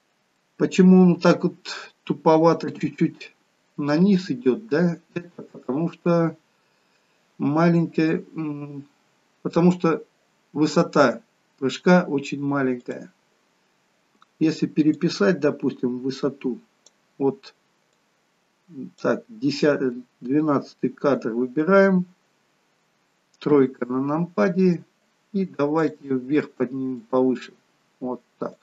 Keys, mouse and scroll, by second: 0.4 middle click, 2.7 KP_3, 12.9 click, 15.1 click, 18.1 click, 23.5 KP_3, 25.9 click, 27.1 click.